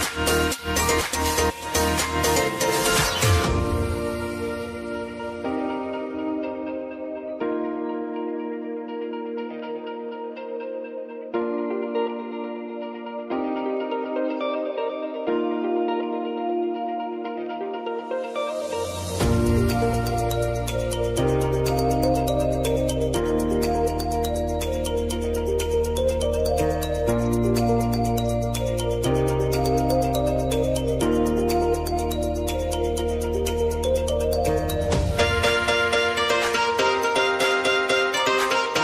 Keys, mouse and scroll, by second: 0.2 r, 0.5 click, 1.2 u, 2.0-3.5 drag, 3.9 k, 6.6 click, 7.1 -, 8.0 Return, 9.7 click, 12.0 Return, 13.6 click, 13.9 space, 15.7 k, 16.9 click, 18.1 Return, 18.9 click, 19.4 space, 22.0 space, 22.7 click, 24.4 u, 25.5 click, 31.1 ctrl+click, 33.9 ctrl+click, 34.7 s, 35.7 click, 36.3 space, 38.6 click.